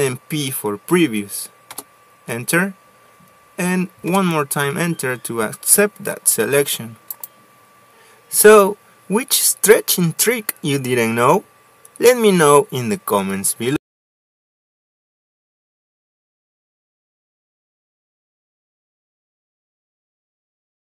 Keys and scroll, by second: 2.2 Return, 4.6 Return, 10.4 Escape.